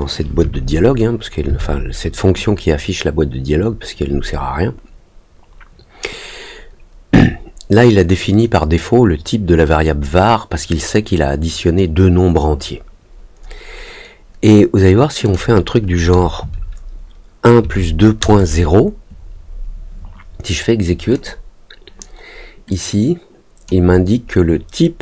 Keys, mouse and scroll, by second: 15.2 click, 21.1 click, 22.6 click.